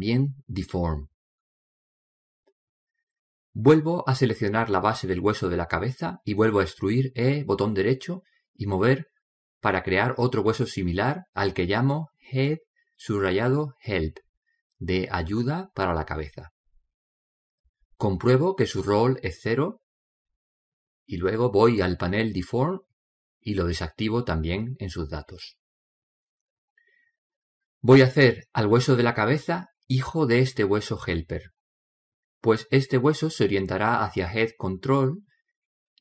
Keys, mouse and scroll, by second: 2.0 middle click, 2.8-5.1 middle drag, 4.9 click, 6.1 right click, 6.7 middle click, 7.9 click, 7.9-9.1 middle drag, 8.3 e, 9.8 click, 11.6 click, 12.6 right click, 14.2 click, 20.7-23.7 middle drag, 23.7 click.